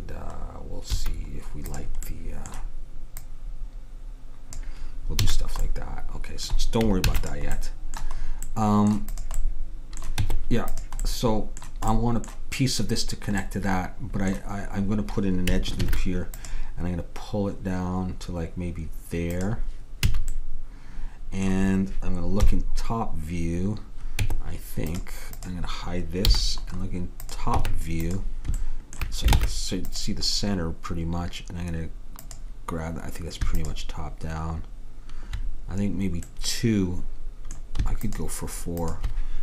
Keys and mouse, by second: 1.0 a, 1.8-5.2 drag, 5.3 a, 5.7 middle click, 7.1 ctrl+s, 9.2-10.6 drag, 10.3 Tab, 15.9 ctrl+r, 20.1 a, 22.5 KP_7, 24.3 Tab, 25.4-27.5 drag, 26.3 h, 27.7 Tab, 29.4 ctrl+Tab, 32.3-36.3 drag, 38.1-39.4 drag.